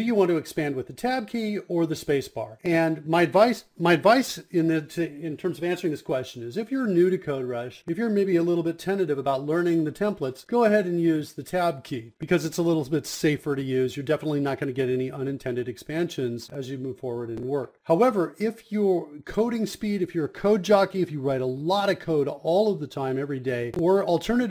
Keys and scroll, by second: 0.1-10.6 typing, 8.2 Return, 11.3 Down, 11.6 Down, 11.7 Down, 11.9 Down, 12.0 Down, 12.1 Down, 12.1 Up, 12.2 Return, 13.6-16.9 typing, 18.6-23.0 typing, 23.2 Return, 23.7 Return, 24.3-24.5 typing.